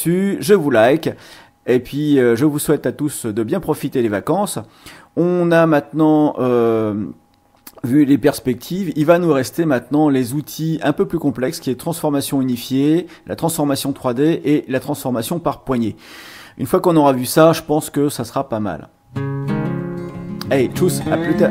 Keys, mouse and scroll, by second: 1.9-21.5 drag.